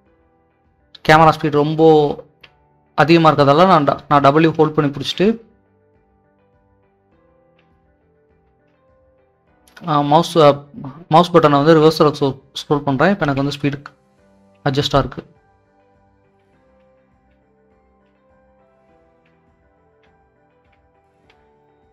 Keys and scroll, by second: 0.2 w, 1.9-8.5 typing, 9.6-19.2 typing, 21.1-21.9 typing.